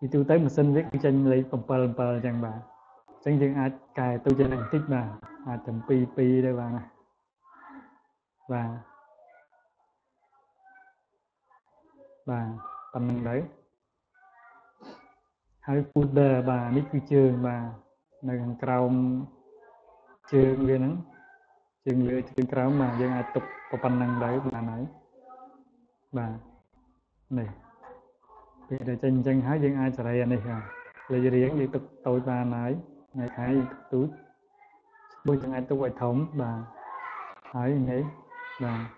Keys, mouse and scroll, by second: 3.8 click, 4.1 click, 5.4 click, 5.6 click, 5.9 click, 6.7 click, 7.7 click, 9.5 click, 10.3 click, 11.1 click, 12.5 click, 12.9 click, 13.3 click, 14.1 click, 16.9 click, 18.3 click, 19.4 click, 19.9 click, 25.8 click, 27.2 click, 28.1 click, 30.4-31.6 drag, 32.9 click, 34.5 click, 37.0 click.